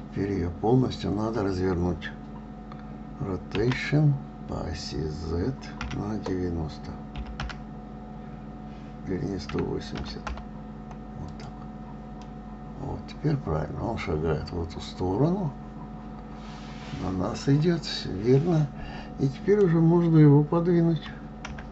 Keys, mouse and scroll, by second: 12.6-15.7 middle drag.